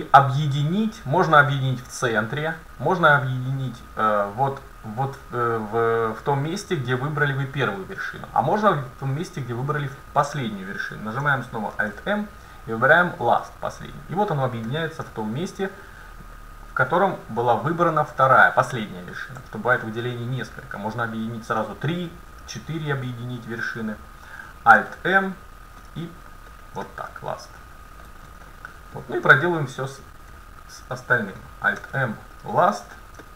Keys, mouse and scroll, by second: 11.8 alt+m, 14.7 scroll up 1, 14.8-17.0 middle drag, 17.8-18.7 scroll up 1, 18.7-21.5 right drag, 24.8 alt+m, 26.6-30.0 middle drag, 30.0-32.3 right drag, 31.8 alt+m, 33.0 middle click.